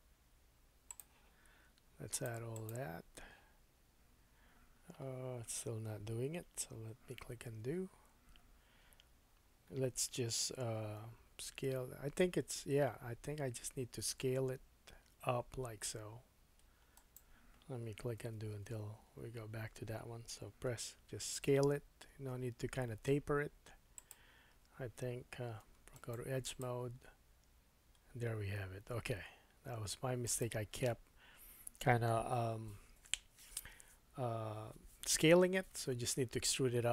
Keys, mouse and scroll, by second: 2.6 click, 7.4 super+z, 11.0 s, 14.1-24.1 drag, 14.1-17.1 right drag, 18.2 super+z, 18.5 super+z, 19.0 super+z, 20.7 e, 24.1-25.9 middle drag, 25.6 2, 25.9 right click.